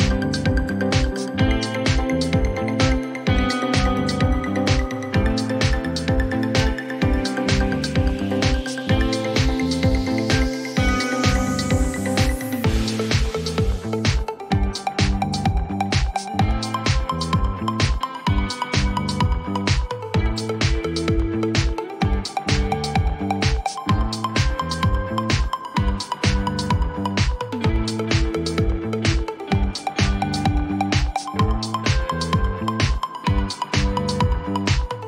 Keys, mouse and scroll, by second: 13.5 click, 14.0 click, 16.5 click, 19.0 click, 19.5-22.3 right drag, 22.3 click, 22.7 click, 25.9 click, 26.9-30.5 typing, 32.4 click, 32.6 click.